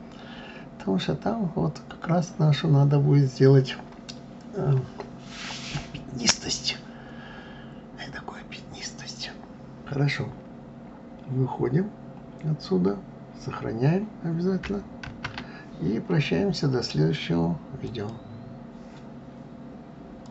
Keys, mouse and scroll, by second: 8.8 click.